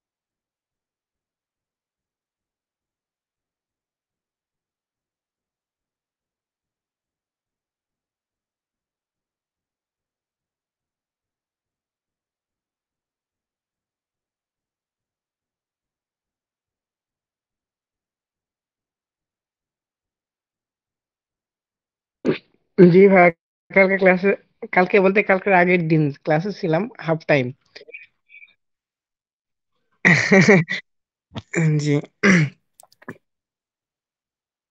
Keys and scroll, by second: 24.8 ctrl+space, 26.4 ctrl+space, 27.2 ctrl+space, 28.1 ctrl+space, 28.8 ctrl+space.